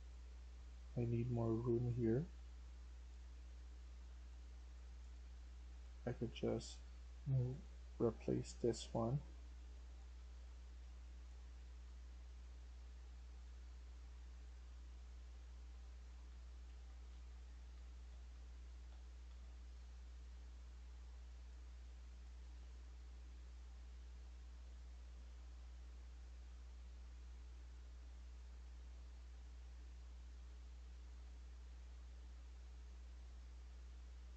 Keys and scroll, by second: 0.0-0.3 typing, 9.8-20.1 typing, 22.5 d, 29.0-30.1 typing.